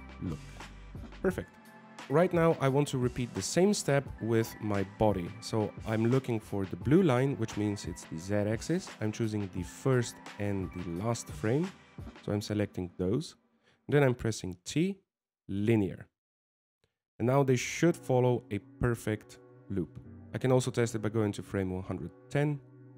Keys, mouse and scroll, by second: 2.0 right click, 2.0 scroll down 1, 2.3 right click, 4.0 right click, 12.6 shift+right click, 16.5 t, 18.2 middle click, 19.9 alt+a, 20.2 alt+a, 20.2 click.